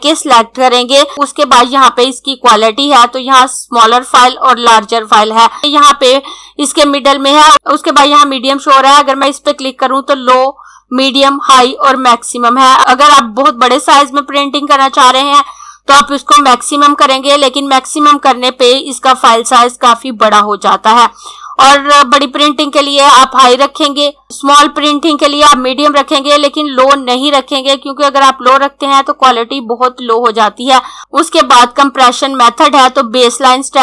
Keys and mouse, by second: 9.2 click, 31.0 click.